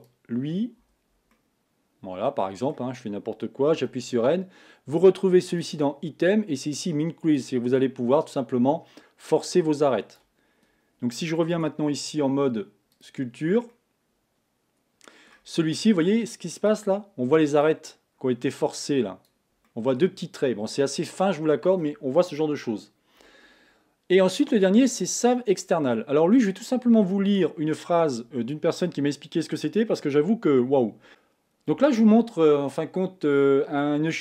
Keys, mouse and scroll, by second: 0.0 alt+click, 1.3-3.8 middle drag, 3.8 n, 7.5-11.6 drag, 11.6 Tab, 13.1 click, 13.7-15.4 middle drag, 15.4-16.7 scroll up 1, 16.7-19.7 drag, 19.7-31.1 middle drag, 31.1-34.2 drag.